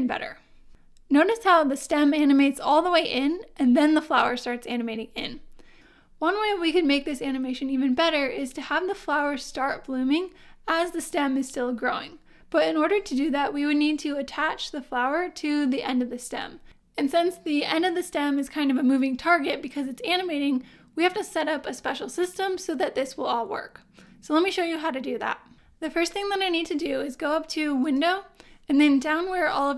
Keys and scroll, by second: 0.0 space.